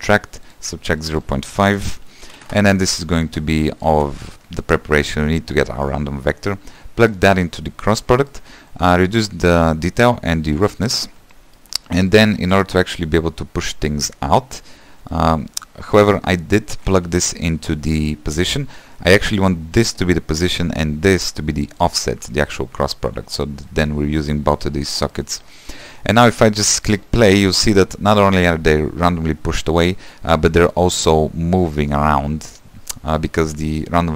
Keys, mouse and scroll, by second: 0.5-19.9 drag, 21.8 click, 26.3 shift+middle click, 27.0 space, 30.5 middle click, 30.9-32.3 scroll up 2.